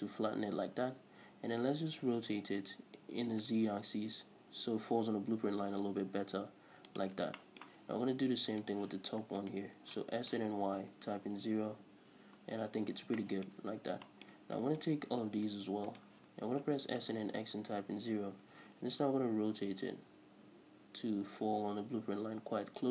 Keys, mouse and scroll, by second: 2.2 r, 7.0 shift+click, 7.4-8.6 shift+middle drag, 8.6 right click, 9.4 ctrl+right click, 10.2 s, 11.9 Return, 13.2 shift+middle click, 13.7 scroll up 1, 14.1 shift+middle click, 14.8 right click, 15.9 ctrl+right click, 16.9 s, 18.2 Return, 20.4 r.